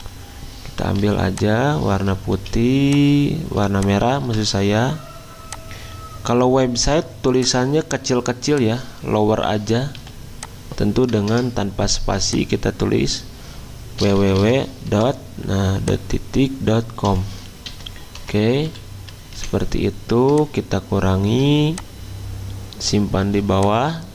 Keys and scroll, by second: 1.0 i, 2.4 z, 3.7 v, 10.0 t, 11.3 BackSpace, 13.8-15.3 typing, 16.8-19.1 typing, 19.3 Escape, 23.1 z.